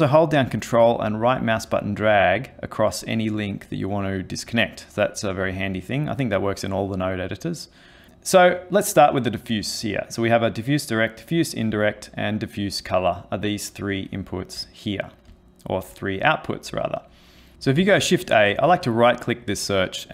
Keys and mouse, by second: 1.1 ctrl+right click, 6.3 click, 14.1 ctrl+middle click, 15.4 shift+middle click, 17.8 shift+a.